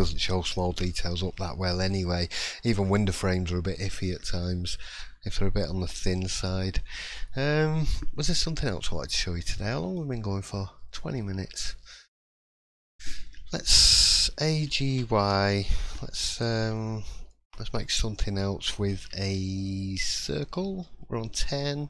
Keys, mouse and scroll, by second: 0.8 shift+middle click, 1.9 middle click, 4.1 middle click, 9.8-10.2 scroll down 1, 10.2 scroll up 1, 16.7 middle click, 16.7 a, 16.7 g, 17.3 shift+middle click, 17.8-18.7 scroll up 2, 18.9 shift+a, 20.8 scroll down 2.